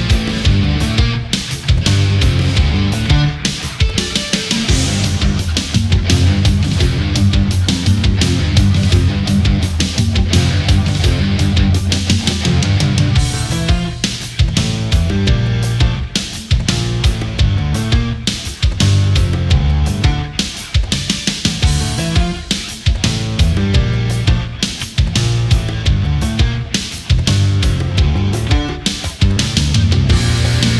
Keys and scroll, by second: 1.7 space, 2.7 ctrl+-, 3.1 space, 4.9 ctrl+s, 7.4 ctrl+z, 25.3 ctrl+z, 26.5 ctrl+z.